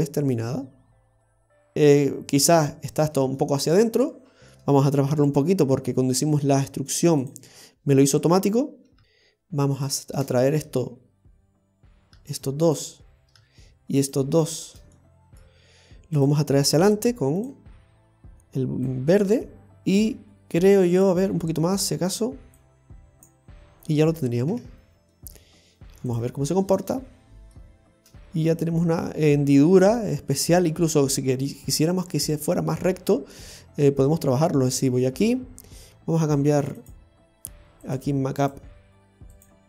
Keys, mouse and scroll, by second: 2.6 scroll up 1, 3.1 scroll up 1, 3.4 shift+middle click, 4.0 middle click, 4.6-5.1 scroll up 1, 5.1 Tab, 5.5-5.8 scroll up 1, 5.8 middle click, 7.2 click, 7.7 middle click, 8.6-9.0 scroll up 3, 9.0 middle click, 9.0-9.8 scroll down 4, 9.8 right click, 10.4 shift+right click, 12.8 shift+right click, 13.4-14.0 scroll down 2, 14.0 shift+right click, 15.0 middle click, 16.7 click, 17.5 click, 20.0 click, 23.9 click, 23.9 middle click, 24.2 scroll up 1, 24.5 Tab, 24.7 scroll down 4, 25.1 middle click, 26.1 click, 26.5 scroll down 1, 26.8 middle click, 27.7-28.3 scroll up 8, 28.3 middle click, 33.1-33.4 scroll up 1, 33.4 middle click, 34.8 Tab, 36.8 click.